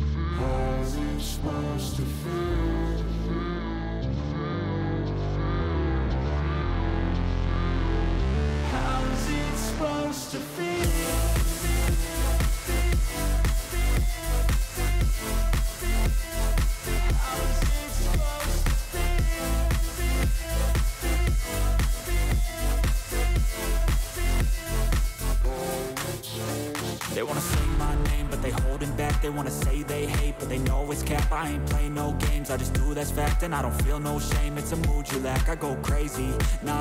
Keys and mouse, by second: 0.1 alt+shift+click, 0.9 alt+shift+click, 1.7 click, 2.6 alt+shift+click, 3.8 alt+shift+click, 4.4 alt+shift+click, 4.8 alt+shift+click, 6.0 click, 8.0-9.2 drag, 13.6-14.7 drag, 16.9 click, 18.3 click, 18.9 click, 19.9 click, 22.1 click, 23.2 click, 23.3 click, 24.7 click, 29.2 click, 29.3 click, 30.4 click, 32.0 alt+click, 32.5 alt+shift+click.